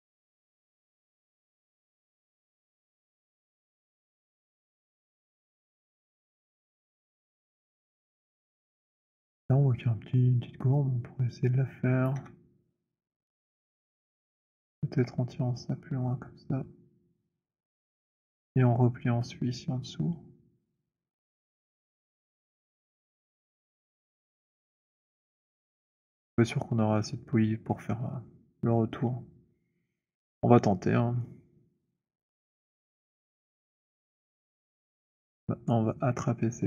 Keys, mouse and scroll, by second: 2.5 click, 3.1 click, 4.9 middle click, 8.2 middle click, 9.2 click, 11.9 click, 12.1 z, 13.6 click, 17.1 middle click, 17.2 click, 18.4 click, 18.6 middle click, 21.5 click, 23.0 click, 25.7 click, 27.8 middle click, 34.0 middle click.